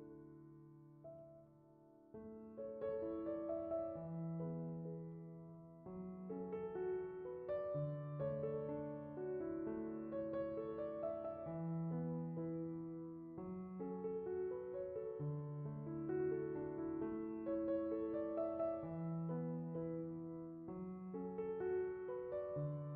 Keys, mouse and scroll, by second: 0.7-7.1 drag, 9.0 click, 9.2 click, 15.7-21.3 right drag, 21.3 click.